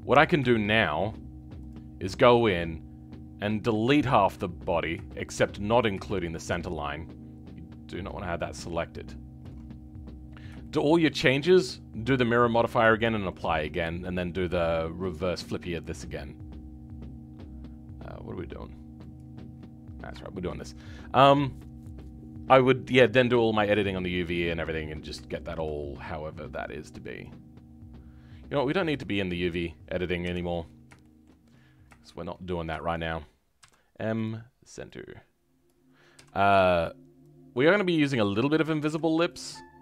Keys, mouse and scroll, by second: 0.5-1.5 shift+middle drag, 1.5-3.6 drag, 4.1-5.0 scroll up 2, 5.0 shift+middle click, 5.7 scroll down 2, 5.9-9.4 shift+middle drag, 9.4 ctrl+click, 9.9-10.6 scroll up 2, 10.6-19.4 shift+middle drag, 19.4 scroll up 2, 20.1-24.0 shift+middle drag, 24.0-25.2 scroll up 2, 25.2-27.2 shift+middle drag, 27.2 click, 28.7 click, 29.3-30.2 scroll up 2, 30.2 KP_7, 30.6-30.9 scroll up 2, 30.9 shift+middle click, 31.4 scroll up 2, 31.9 shift+middle click, 32.3-32.7 scroll up 2, 32.7-34.2 shift+middle drag, 34.2 m, 35.6 click, 36.5 m.